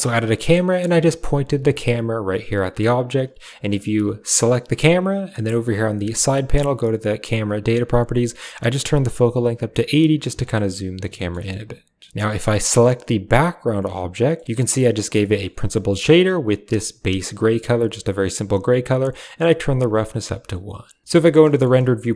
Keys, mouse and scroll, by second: 0.6 KP_0, 2.9 click, 3.6 g, 5.8 click, 10.2 shift+middle drag, 11.2 shift+middle click, 12.2 click, 14.2 middle click, 14.9 click, 15.1 middle click, 15.4 drag, 15.6 typing, 16.0 click, 21.0 z, 21.5 shift+middle click, 21.8 a.